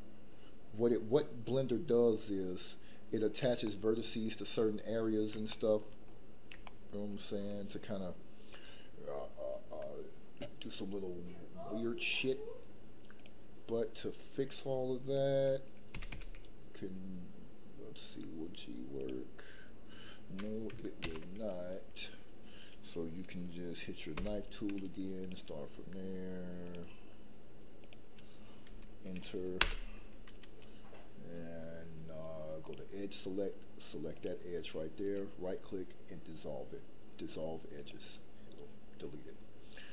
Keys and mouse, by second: 3.6 shift+middle click, 5.4 shift+middle click, 6.6 shift+middle click, 13.1 click, 15.9 g, 16.1 g, 18.9 click, 21.0 ctrl+z, 24.1 k, 35.2-38.0 right drag.